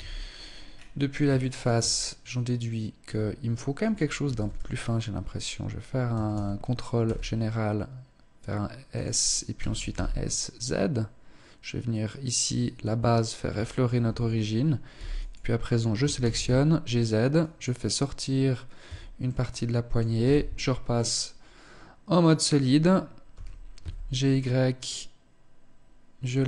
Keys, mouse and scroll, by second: 0.5 shift+middle click, 0.5-1.2 scroll down 1, 1.2-2.5 scroll up 2, 3.6 s, 5.5 a, 5.7 a, 6.4 s, 8.7 click, 8.9 s, 13.1 shift+middle click, 13.1 a, 14.3 b, 15.3 g, 18.2 Tab, 18.7 middle click, 19.5 z, 20.3 middle click, 22.7 g.